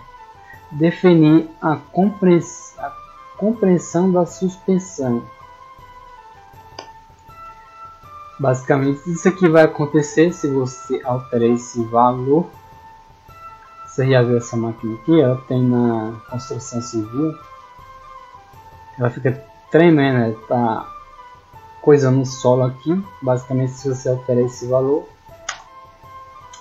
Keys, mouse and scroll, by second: 5.8-6.5 scroll down 1, 8.1 click, 9.0 click, 9.8 click, 11.4 click, 13.0 middle click, 13.5 scroll up 1, 14.0 middle click, 14.7 scroll down 1, 15.3-17.9 middle drag, 18.3 scroll up 2, 20.2 scroll down 2, 24.5 click.